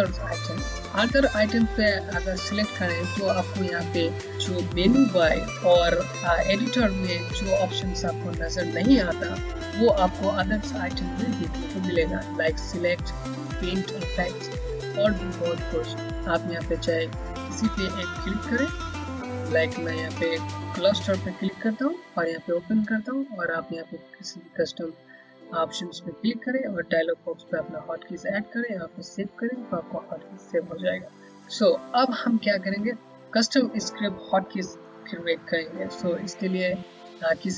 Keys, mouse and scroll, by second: 18.5 click, 21.8 click, 31.3 click.